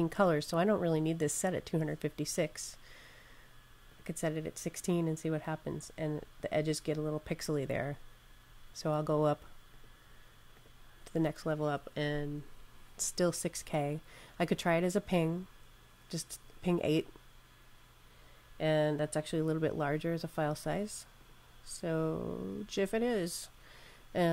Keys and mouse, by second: 1.4 click, 3.7 click, 9.6 click, 14.4 click, 21.0 click.